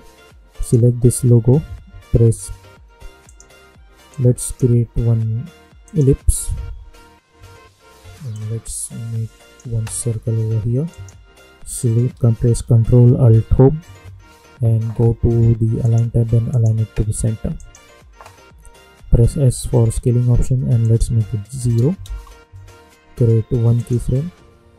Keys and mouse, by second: 3.2-5.8 drag, 8.3-10.9 drag, 13.2 ctrl+alt+Home, 15.7 click, 18.9 s, 20.8 click, 22.0 Return, 23.7 click, 24.0 space.